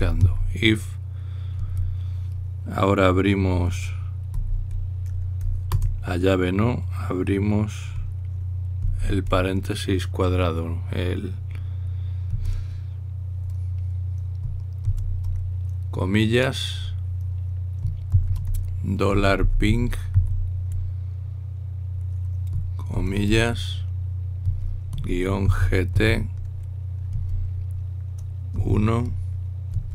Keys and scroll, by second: 0.7 typing, 5.2 shift+[, 9.6 typing, 18.6-21.3 typing, 25.9-26.7 typing, 29.2 typing.